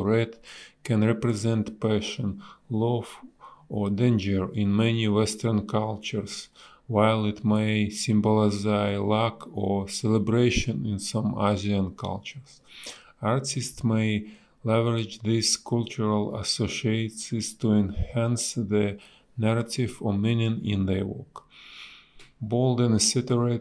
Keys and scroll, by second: 0.1 a, 1.5 space, 13.7 b, 16.5 ctrl+z, 17.1 ctrl+z, 19.9 ctrl+z.